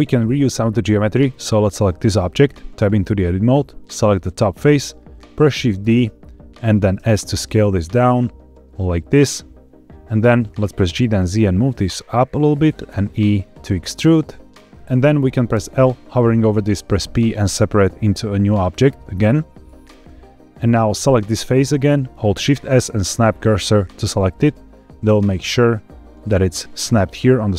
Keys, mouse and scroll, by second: 1.1 click, 2.4 Tab, 3.7 click, 5.8 shift+d, 6.9 s, 9.9 middle click, 9.9 click, 10.6 g, 10.7 z, 12.6 click, 13.1 e, 15.4 l, 16.6 p, 20.8 click, 22.2 shift+s, 24.1-25.3 middle drag.